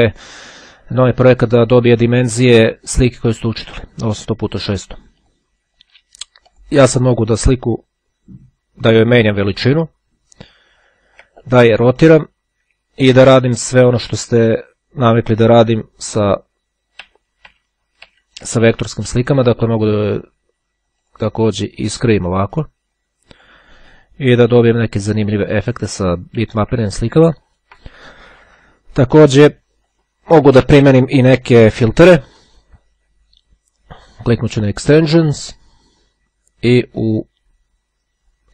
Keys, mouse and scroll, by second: 1.5 click, 2.8 click, 5.3 click, 6.7 click, 9.5-11.6 ctrl+drag, 11.9 click, 13.4-15.2 ctrl+drag, 16.8 z, 19.5 click, 20.3 click, 21.2 click, 22.4-24.1 drag, 26.5 ctrl+z, 28.4 click, 30.0 click, 34.3 click.